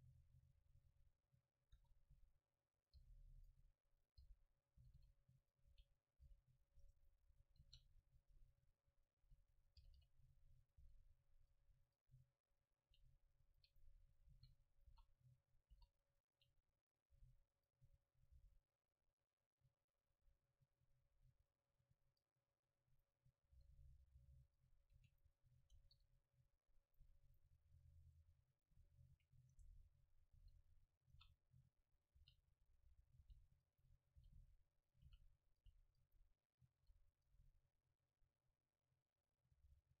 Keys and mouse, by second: 1.1 middle click, 1.7 s, 2.9-4.5 drag, 3.0 g, 3.6-4.9 middle drag, 3.6 right click, 4.2 g, 4.8-8.1 drag, 4.8 right click, 4.8 r, 5.7 r, 6.2 g, 6.8-8.1 right drag, 7.3 middle click, 7.6 shift+d, 9.1 click, 9.2 g, 9.5 click, 9.8 r, 10.8 r, 11.6 g, 12.4-13.7 drag, 12.9 g, 14.3 shift+d, 14.8-18.0 drag, 14.9 r, 15.7 s, 17.1 g, 18.3 g, 20.1-21.9 drag, 23.4-24.6 middle drag, 23.6 r, 24.6-26.8 drag, 25.0 a, 25.8 KP_0, 26.8-28.4 middle drag, 29.6-32.2 right drag, 30.4 shift+d, 31.2-37.8 drag, 31.2-32.2 middle drag, 31.2 r, 32.3-35.7 typing, 32.8 middle click, 32.8 right click, 36.9 r, 37.3 g, 39.8-40.0 drag.